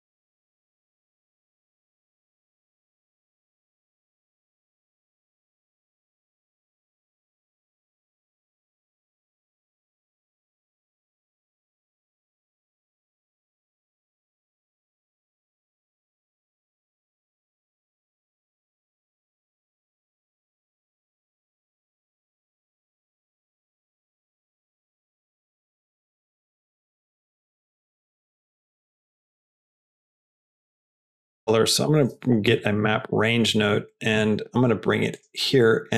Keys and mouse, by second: 2.8 middle click, 3.5 click, 3.9 shift+a, 8.9-10.7 drag, 11.4-11.9 drag, 12.9-14.5 drag, 17.4 click, 23.7 click, 25.1 click, 26.0 click, 26.6 click, 29.8 middle drag, 30.2 click, 30.5 shift+click, 30.7 shift+a, 34.1 Down.